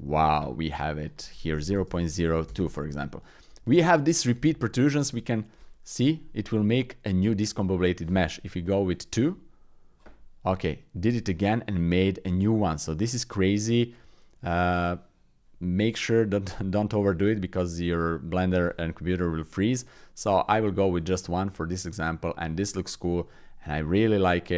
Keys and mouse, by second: 1.0-2.3 drag, 2.3 right click, 11.0-12.4 middle drag, 12.6-14.6 middle drag, 19.8 click, 20.7 middle click, 21.7 middle click, 22.4 Tab, 23.4 shift+click, 23.8 click, 24.4 click.